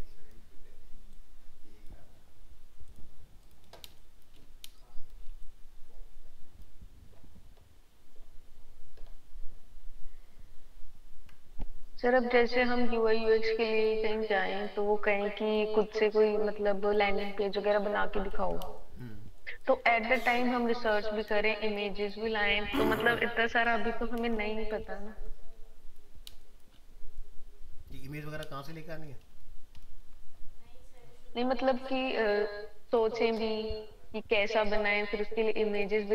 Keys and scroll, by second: 29.7 ctrl+-.